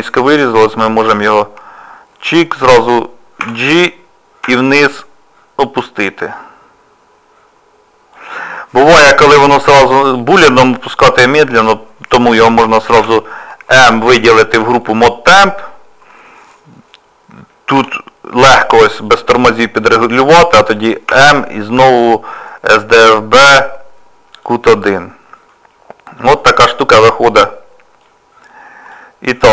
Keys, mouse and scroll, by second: 0.9 click, 3.4 g, 9.5 middle click, 25.5 middle click, 28.0 click.